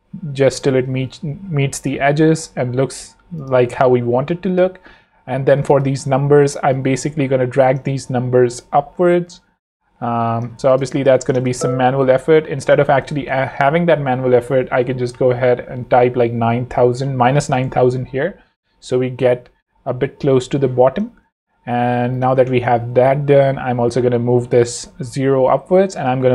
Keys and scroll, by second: 0.9 shift+Up, 10.8 shift+space, 11.4 shift+super+space, 11.5 super+z, 13.1 super+Left, 13.7 super+-, 14.2 -, 14.6 shift+super+Right, 15.8 9, 16.1 0, 17.2 Return.